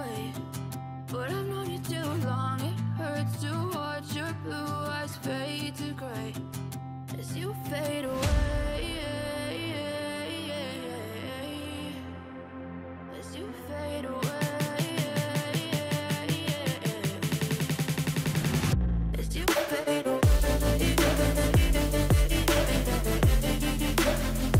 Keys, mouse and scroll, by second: 4.9 ctrl+=, 5.2 ctrl+=, 5.5 ctrl+=, 6.7 ctrl+-, 6.9 ctrl+-, 11.1 ctrl+alt+shift+e.